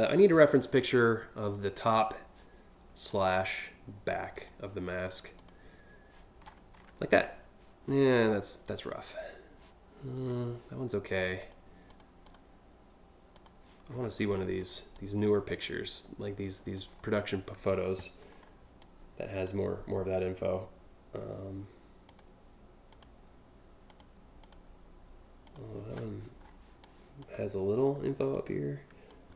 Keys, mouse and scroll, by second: 2.7 click, 3.9 click, 5.0 click, 6.0-6.5 scroll up 2, 6.8 click, 8.2 click, 9.8 scroll up 2, 11.0 click, 11.5 click, 11.8 click, 13.0 click, 13.5-13.9 scroll up 3, 14.1 scroll down 1, 14.6-16.3 drag, 16.5 scroll up 2, 16.8 scroll down 1, 17.9 scroll down 4, 18.4 click, 19.2 scroll up 2, 21.7 click, 22.5 click, 23.5 click, 24.0 click, 25.1 click, 26.1 scroll up 3, 26.5 click, 27.0 scroll up 1, 27.7 scroll down 2, 28.0 click.